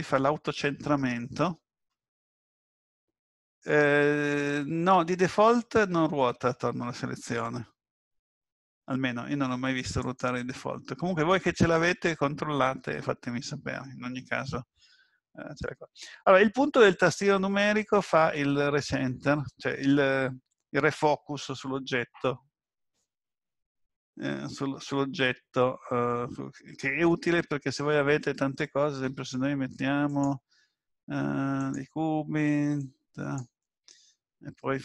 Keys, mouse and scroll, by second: 10.0 click, 18.3 KP_Decimal, 27.2-28.0 scroll down 3, 29.1 shift+a, 32.8 click.